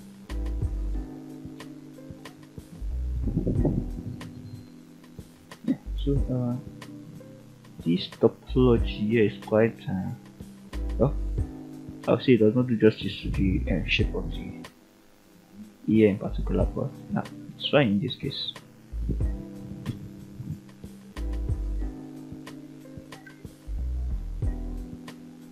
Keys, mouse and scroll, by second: 0.0 scroll down 1, 0.4-1.6 middle drag, 1.8 scroll up 1, 2.2 shift+middle click, 3.1-4.8 middle drag, 5.0 scroll up 1, 5.5-5.9 shift+middle drag, 6.6 click, 7.9 e, 10.0 drag, 10.6 e, 11.8 click, 12.8 ctrl+click, 13.5 f, 14.3 shift+middle click, 15.6 click, 16.0 g, 17.4 click, 18.0 click, 18.4 g, 19.2 click, 19.8 click, 20.1 g, 22.1 click, 22.6 click, 23.7-24.4 middle drag, 25.1 e.